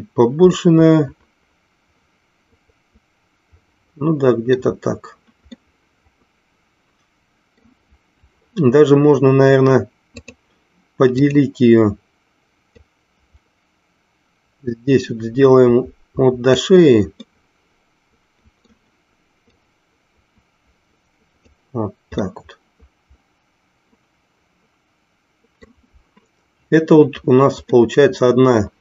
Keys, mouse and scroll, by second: 0.7-4.5 middle drag, 5.6-7.6 middle drag, 10.2-11.5 drag, 12.9-16.7 drag, 17.3-18.8 middle drag, 19.7-21.7 drag, 22.3-25.7 middle drag, 27.8-28.8 middle drag.